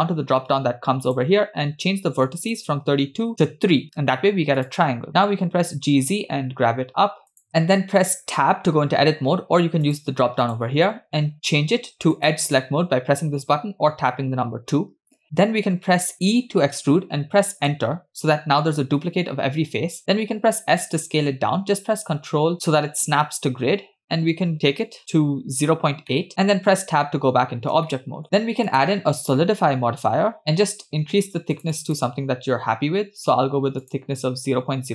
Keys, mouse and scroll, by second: 1.2 click, 2.4 click, 4.6 click, 5.3 g, 7.5-7.8 shift+middle drag, 7.5 scroll up 2, 8.4 Tab, 9.9 click, 12.2 click, 14.4 2, 16.3 e, 20.3 s, 26.1 middle click, 26.7 Tab, 27.2-27.6 scroll up 1, 27.8-28.2 shift+middle drag, 28.7-30.4 drag, 31.6 click, 31.7 click, 31.9 click, 33.8 click.